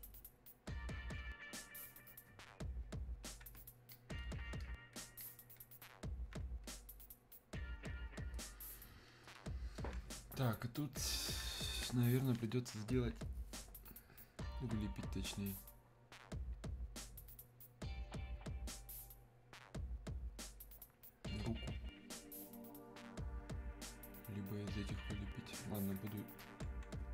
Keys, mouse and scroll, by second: 3.9-9.7 alt+drag, 15.0-27.1 drag.